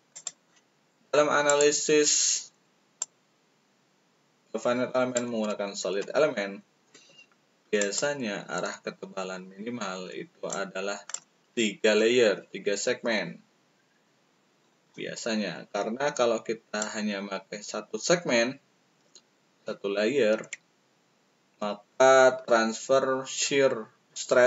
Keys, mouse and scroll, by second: 0.0 click, 1.4 click, 2.9-5.1 shift+drag, 7.8 click, 10.5 shift+click, 14.8-16.7 shift+drag.